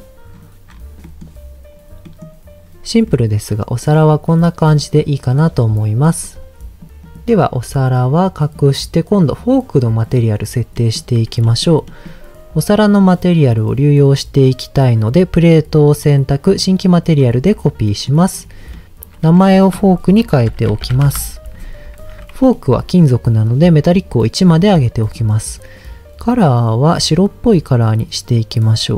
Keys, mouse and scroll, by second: 3.0 middle click, 4.3 middle click, 5.9-6.9 scroll up 3, 7.0 click, 7.6-8.2 scroll down 1, 8.4 click, 9.2 click, 10.0 click, 10.8 middle click, 11.0-11.3 scroll up 1, 11.4 shift+middle click, 11.8 middle click, 12.9-15.3 drag, 16.6 click, 17.2-17.6 scroll up 2, 17.8 middle click, 18.4-18.9 scroll down 2, 18.7 middle click, 19.3-21.1 drag, 22.0 ctrl+z, 22.5 middle click, 23.9 click, 24.9 middle click, 27.2 click.